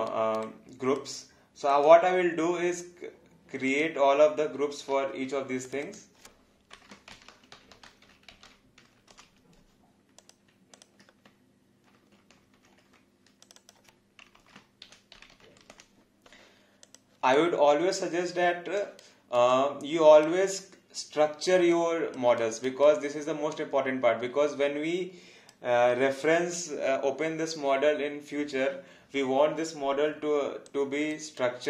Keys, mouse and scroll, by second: 0.1 alt+right click, 0.7 alt+click, 3.6 shift+click, 4.9 ctrl+g, 5.6 click, 6.9-9.3 typing, 10.2 click, 10.7 ctrl+click, 12.6 ctrl+g, 13.4 click, 14.8-16.0 typing, 16.8 click, 17.3 alt+click, 19.0 alt+right click, 19.5 alt+click, 21.7 alt+click, 30.6 click, 31.4 right click.